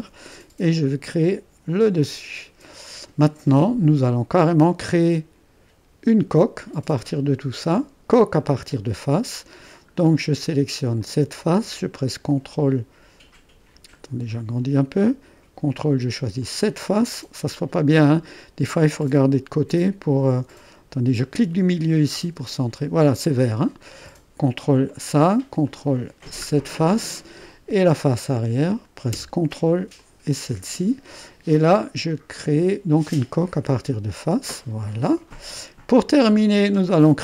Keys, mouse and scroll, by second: 1.1-4.1 drag, 4.1-4.6 scroll down 1, 4.9-6.0 drag, 6.0 middle click, 6.3 click, 6.4 middle click, 8.7-11.0 drag, 11.2 click, 14.4 middle click, 14.6-15.1 scroll up 2, 14.7 middle click, 18.3-19.6 middle drag, 19.7 middle click, 20.6-21.6 middle drag, 22.5-24.2 middle drag, 26.6 scroll down 2, 26.7 middle click, 27.6-28.8 drag, 29.2-30.9 middle drag, 34.1 click.